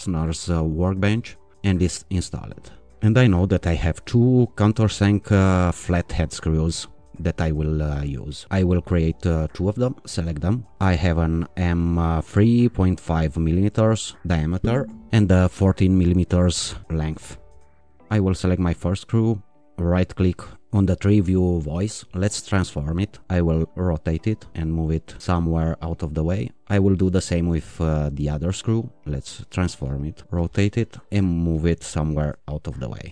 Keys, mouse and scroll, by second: 0.9 click, 6.8 click, 8.5 click, 10.0-12.0 shift+drag, 13.0 click, 15.6 click, 16.6 click, 17.9 click, 19.9 right click, 22.1 click, 23.2-25.9 drag, 26.3 click, 27.3 click, 27.8-28.6 middle drag, 29.4-32.8 drag.